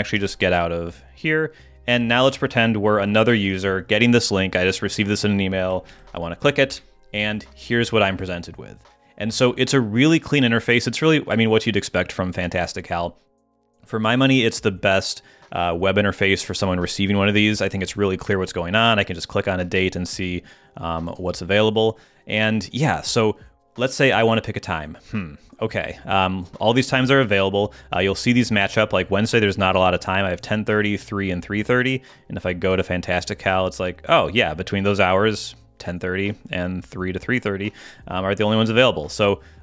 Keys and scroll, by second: 0.1 super+h, 3.3 super+t, 5.8 super+v, 6.7 Return.